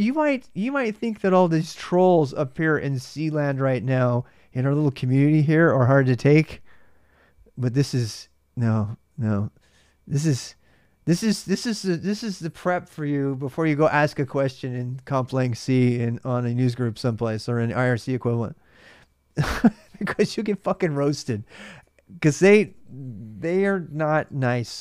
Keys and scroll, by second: 21.1-22.9 typing, 24.0 alt+Tab.